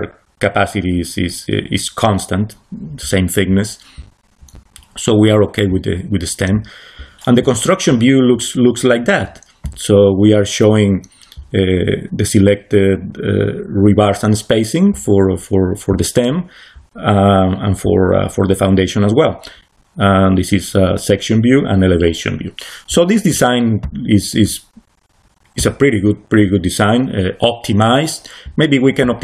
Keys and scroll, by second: 8.4 c, 22.9 c, 27.9 c.